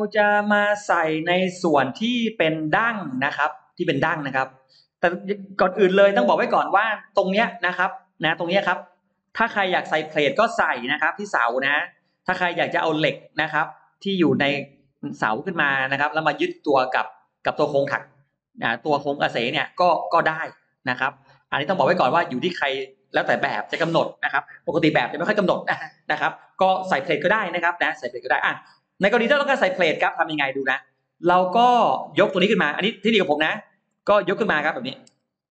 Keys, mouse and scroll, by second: 0.3-1.0 scroll down 1, 1.2-2.3 middle drag, 3.6-4.4 scroll up 3, 7.0-7.4 scroll down 2, 7.4 middle click, 8.0-8.7 scroll up 4, 9.0 middle click, 21.3-22.0 scroll down 2, 29.1-29.8 scroll down 3, 29.6-30.9 middle drag, 30.3-30.6 scroll down 1, 31.8-33.4 drag, 33.8 middle click, 35.0 m, 35.1 click.